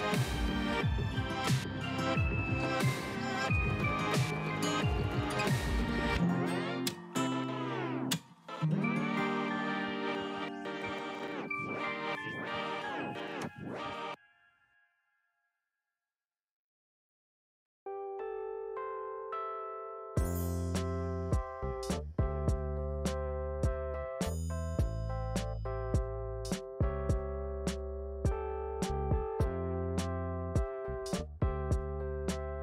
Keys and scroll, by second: 10.9-12.0 typing.